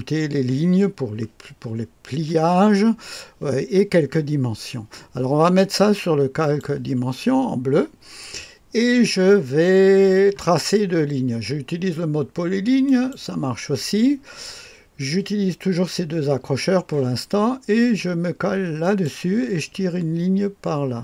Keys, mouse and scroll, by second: 6.4 click, 12.8 click, 18.8 click.